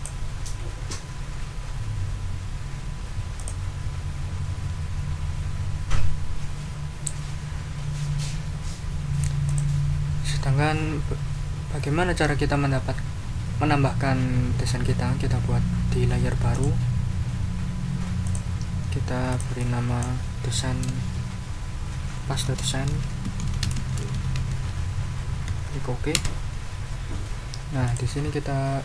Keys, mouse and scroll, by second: 3.4 click, 9.4 click, 16.5 click, 18.3 click, 22.2-25.4 typing, 26.1 Return, 27.8 click.